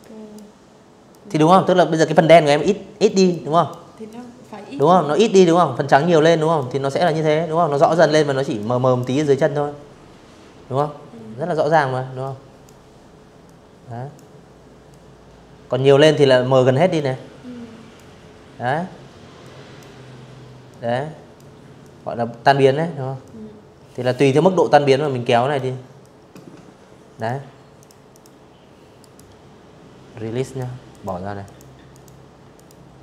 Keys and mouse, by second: 1.0 click, 1.7 click, 4.2-4.7 drag, 6.2 click, 8.4-9.4 drag, 9.9-10.3 drag, 11.1-11.8 drag, 12.6-13.6 drag, 14.6-15.6 drag, 17.1 click, 18.3-19.0 drag, 19.4-20.1 drag, 20.9-22.2 drag, 22.7-23.2 drag, 23.7 click, 24.8 click, 25.4 click, 25.8 click, 26.7 right click, 28.1 click, 29.1 click, 30.2 click.